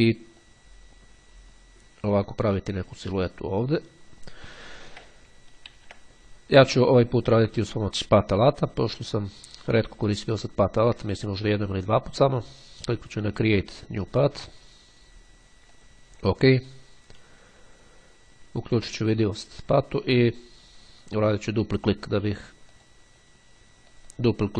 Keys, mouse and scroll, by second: 0.6-5.3 drag, 5.8 ctrl+z, 7.7 click, 12.8-14.8 drag, 15.8 click, 17.7-19.6 drag, 21.4 click, 23.0 click, 24.0 click.